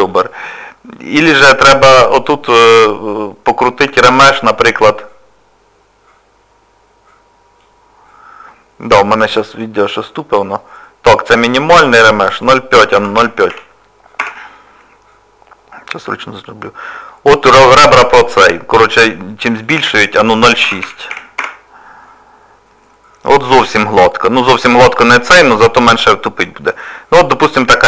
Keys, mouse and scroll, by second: 1.5 click, 4.3 click, 11.6 click, 17.2 scroll up 1, 19.6 click, 23.2 scroll down 1, 23.7 middle click, 24.9 click, 25.6 middle click.